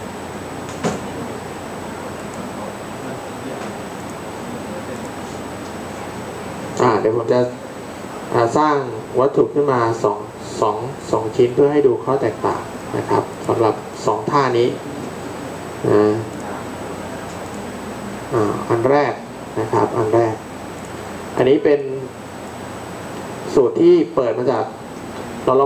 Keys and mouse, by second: 5.1-6.7 drag, 18.1 click.